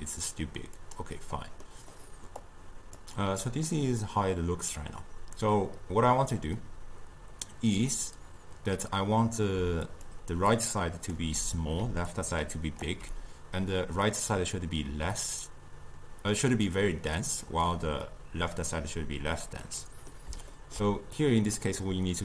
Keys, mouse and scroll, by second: 0.8 click, 1.6-2.4 middle drag, 2.4 click, 3.7-6.8 middle drag, 9.6 d, 10.1 d, 10.1-11.2 drag, 11.2 d, 11.9 d, 12.1-12.8 drag, 12.8 d, 19.7-21.2 middle drag, 21.2 click.